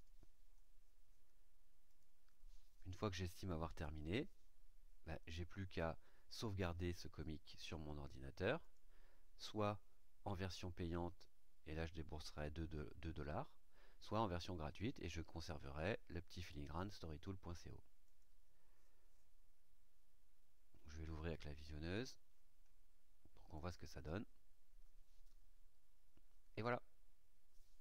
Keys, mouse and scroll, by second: 1.8 click, 8.6 click, 18.0 click, 23.5 click.